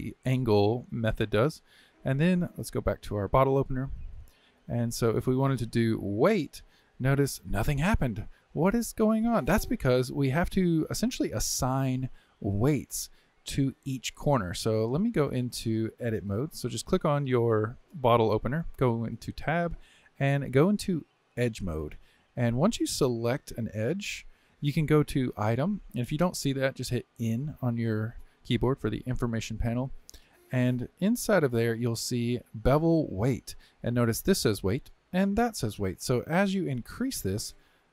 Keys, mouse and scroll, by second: 3.3 click, 5.5-7.6 drag, 7.6-16.1 middle drag, 16.1 click, 17.1 click, 18.8 Tab, 21.4 click, 23.1 click, 25.3 click, 26.6 n, 27.1 n, 30.7 click, 36.5-37.9 drag.